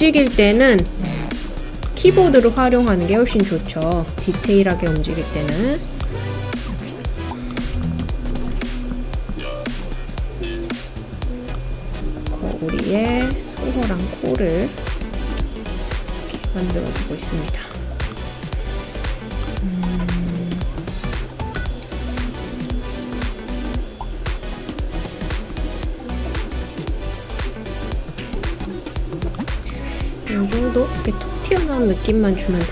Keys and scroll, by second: 0.3 Page_Up, 15.0 End, 15.4 Page_Up, 16.1 End, 16.5 Page_Up, 28.3 Right.